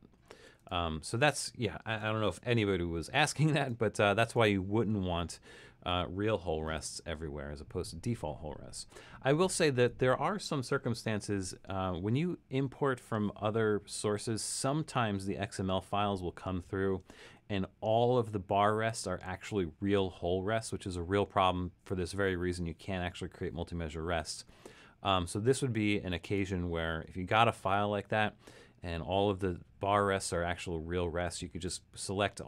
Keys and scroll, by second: 1.2 super+z, 2.7 super+-, 27.6 super+a.